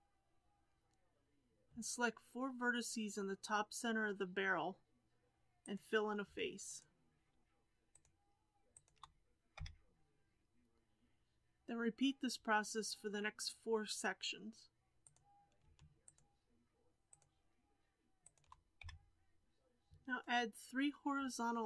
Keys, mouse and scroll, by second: 0.2-3.4 scroll up 2, 5.6 click, 6.6 shift+click, 7.9 shift+click, 8.7 shift+click, 9.5 f, 14.9 click, 16.0 shift+click, 17.0 shift+click, 18.2 shift+click, 18.7 f.